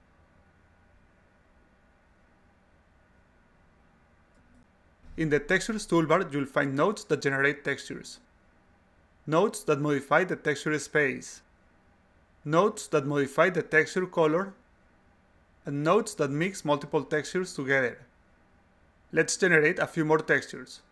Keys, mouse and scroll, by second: 5.6 click.